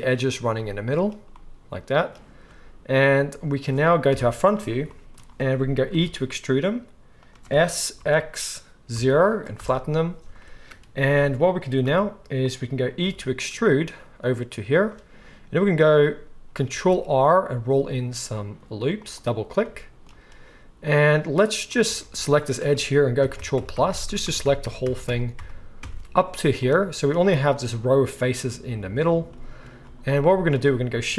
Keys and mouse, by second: 4.1 KP_1, 4.6 middle click, 6.2 e, 7.5 s, 11.0 g, 11.7-14.9 drag, 11.8 r, 13.0 e, 14.9 right click, 15.8-19.0 ctrl+drag, 16.7 ctrl+r, 19.0 right click, 19.6-26.9 drag, 22.0 alt+a, 22.4 alt+shift+middle click, 22.4 alt+shift+right click, 23.2 ctrl+KP_Add, 23.4 ctrl+KP_Add, 23.5 ctrl+KP_Add, 23.7 ctrl+KP_Add, 23.9 ctrl+KP_Add, 24.1 ctrl+KP_Add, 24.2 ctrl+KP_Add, 24.4 ctrl+KP_Add, 24.6 ctrl+KP_Add, 24.8 ctrl+KP_Add, 25.0 ctrl+KP_Add, 25.4 ctrl+KP_Add, 25.8 ctrl+KP_Add, 26.9-31.1 shift+right drag.